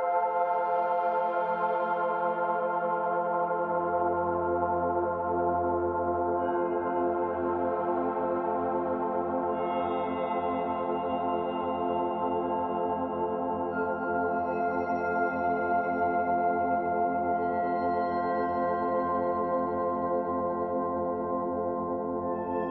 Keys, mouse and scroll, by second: 3.5 click, 9.3 click, 13.4 click, 15.9 click.